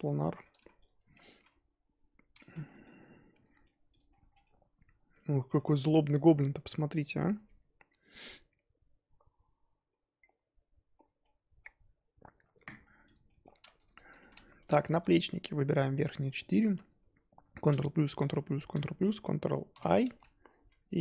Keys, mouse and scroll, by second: 0.0-0.8 middle drag, 0.8 shift+click, 1.3 g, 2.5 Tab, 2.6 scroll down 3, 2.8-3.9 middle drag, 3.9 click, 4.0-4.4 scroll down 5, 4.4-5.9 middle drag, 5.9-9.8 scroll up 4, 11.3-13.1 middle drag, 13.1 click, 13.2 middle drag, 13.4-14.0 scroll up 5, 14.1 Tab, 14.4-14.9 shift+middle drag, 14.9 3, 15.6 click, 16.5 click, 17.7 ctrl+KP_Add, 18.2 ctrl+KP_Add, 19.7 ctrl+i, 20.6 z.